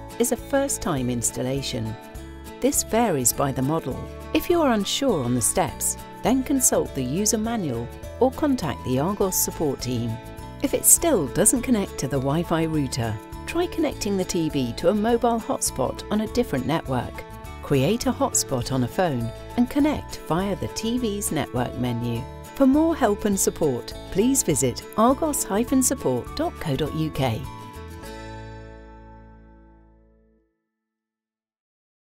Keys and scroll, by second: 11.2 Down, 14.0 Return, 16.8 Return.